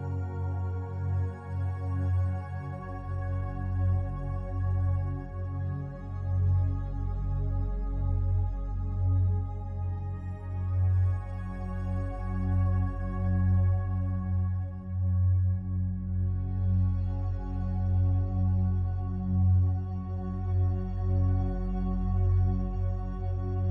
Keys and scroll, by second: 5.2 shift+F5.